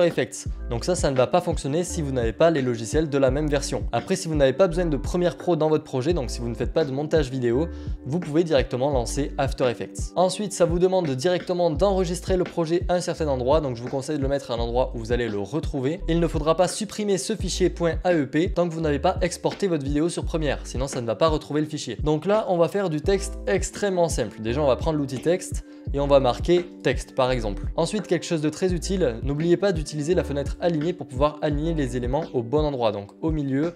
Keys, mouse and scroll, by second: 10.1-11.5 scroll, 11.5 scroll down 1, 13.0-13.7 scroll, 21.9 click, 25.2 click, 29.9 click, 31.2 click.